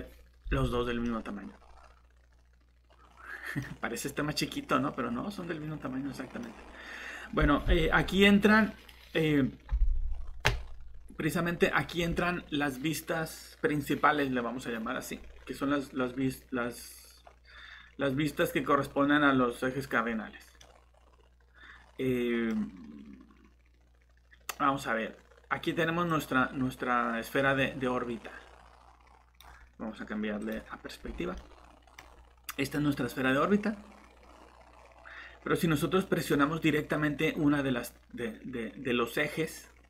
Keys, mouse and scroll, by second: 1.0 middle click, 6.5 scroll down 1, 10.1 scroll up 1, 20.6 middle click, 26.1 click, 31.0 scroll down 1, 31.3 middle click, 32.7 click.